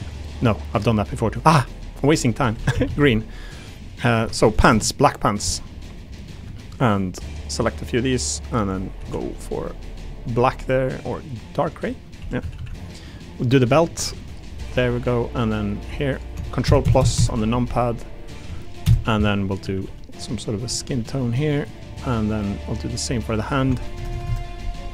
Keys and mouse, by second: 1.9 click, 2.5 3, 2.7 a, 2.8 a, 3.9 alt+click, 6.0 click, 6.9 shift+click, 7.9 click, 8.9 a, 9.2 g, 10.2 click, 10.5 g, 11.6 click, 12.0 click, 12.2 3, 12.4 a, 12.5 a, 13.4 alt+click, 14.0 a, 14.1 g, 15.5 click, 15.8 3, 16.1 click, 17.7 click, 19.6-20.8 typing, 22.3 click, 22.6 middle click, 23.0 3, 23.2 click.